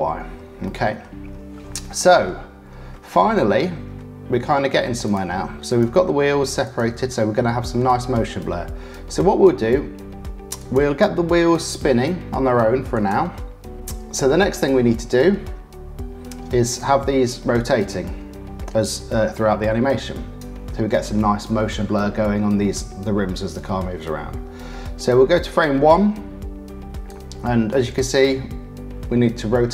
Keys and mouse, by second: 0.6 middle click, 1.9 middle click, 2.8-4.2 middle drag, 5.0 click, 5.6 click, 6.6 click, 10.5 click, 12.9 click, 16.8-20.4 drag, 23.0 ctrl+z, 27.1-29.6 drag.